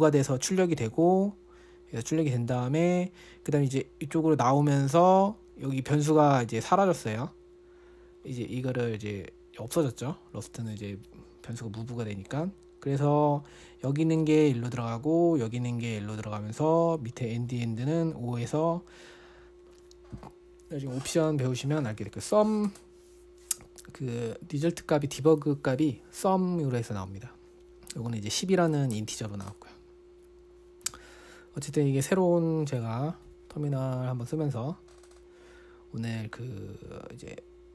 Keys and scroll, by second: 34.2 Escape.